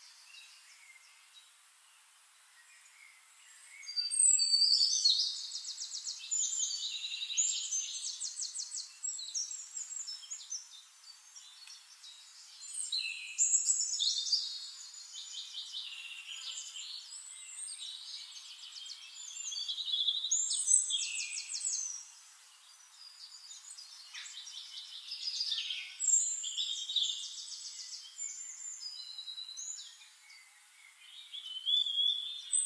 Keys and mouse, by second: 0.2-1.3 shift+right drag, 2.5 click, 4.4 click, 5.7 click, 6.9-10.5 drag, 10.4 ctrl+z, 10.8-15.2 drag, 15.4-19.5 drag, 17.8-19.5 middle drag, 17.8 right click, 18.5-19.5 right drag, 19.7 click, 20.8 click, 22.7 click, 23.8-28.3 drag, 26.4-28.3 shift+right drag, 27.0-28.3 middle drag, 30.1-31.9 middle drag, 32.2-32.6 drag.